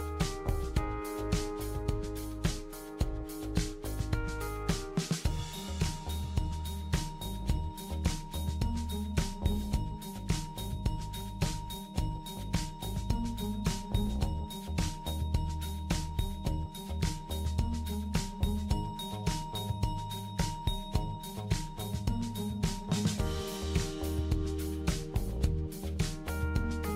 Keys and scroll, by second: 0.0-0.1 typing, 2.5-3.4 typing, 6.2-7.0 typing, 9.1-9.9 typing, 17.2-18.0 typing, 20.9-21.8 typing.